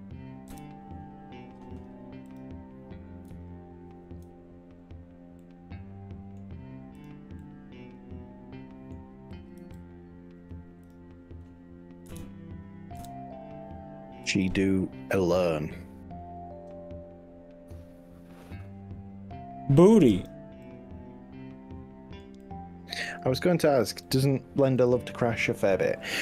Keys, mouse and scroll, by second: 0.5 KP_3, 2.3 click, 3.3 z, 4.9 scroll up 2, 5.4 middle click, 5.9 z, 7.1 click, 7.5-9.1 middle drag, 9.6 g, 10.8 click, 12.1 KP_1, 13.0 KP_3, 14.3 g, 20.1 click, 20.7-22.3 middle drag, 22.5 middle click, 23.5 click, 24.1 z, 24.9 click, 25.7 middle click, 26.1-26.2 scroll down 4.